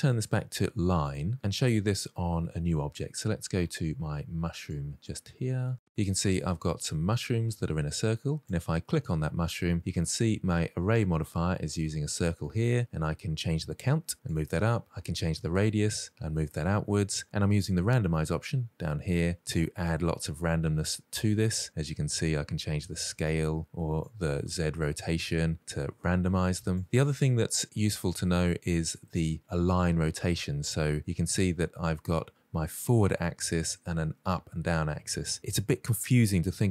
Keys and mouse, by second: 3.0 click, 3.5 click, 4.1 click, 4.6-5.0 shift+middle drag, 5.2 shift+middle drag, 5.9-6.7 middle drag, 7.0 shift+middle drag, 7.4 middle click, 8.4 click, 12.6-14.2 drag, 15.1-17.1 drag, 19.5-19.9 middle drag, 21.5-22.9 drag, 23.9-26.3 drag, 27.5-28.0 middle drag, 28.8 middle click.